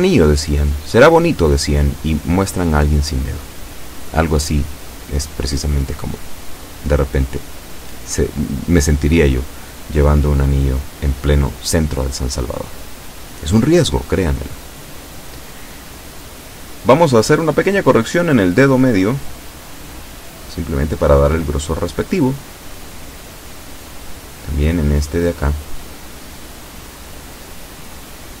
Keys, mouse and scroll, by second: 8.8-10.4 shift+middle drag, 13.7 shift+middle click, 14.2 shift+a, 15.2 b, 16.0 click, 17.5-19.7 drag, 20.9 shift+middle click, 22.1 a, 22.4 b, 23.2 click, 24.6-27.2 drag, 27.8 a, 28.2 b.